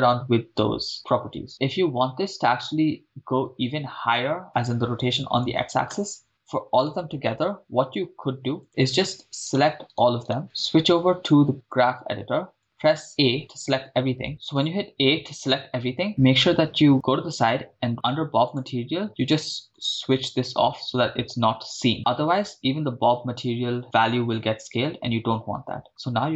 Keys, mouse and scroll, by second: 6.0 shift+space, 6.9 KP_0, 8.6 click, 9.6 click, 9.6 right click, 9.8 shift+right click, 10.9 drag, 10.9 shift+right click, 12.6 click, 12.6-13.0 scroll down 5, 13.1 a, 15.1 a, 18.5 click, 19.9 click, 20.7 scroll down 1, 21.9 scroll up 1, 26.0 s.